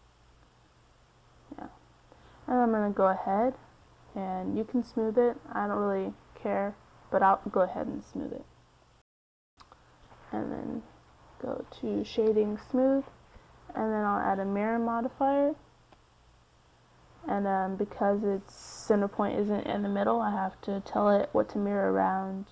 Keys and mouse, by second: 0.5-3.5 drag, 5.5-12.0 drag, 19.4-22.0 drag.